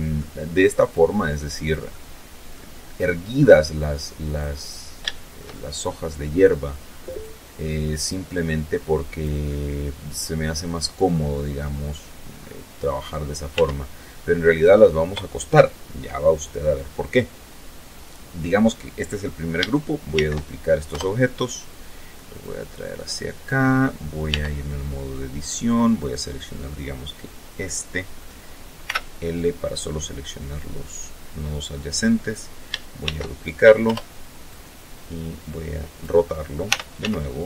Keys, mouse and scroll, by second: 0.8 middle click, 2.4 click, 3.3-3.7 scroll up 3, 3.7 shift+middle click, 4.8 shift+scroll down 2, 5.6 right click, 6.6-8.0 drag, 8.1-10.2 middle drag, 10.5-10.9 scroll down 1, 11.0-11.3 scroll up 1, 11.4-11.8 scroll down 2, 12.1 Tab, 18.7 shift+d, 19.5 Return, 21.0-22.2 drag, 22.9 Tab, 24.5 right click, 27.4 ;, 28.3-30.5 drag, 31.5 shift+d, 32.4 Return, 33.0-34.7 drag, 35.2 r, 35.5 z, 37.3 click.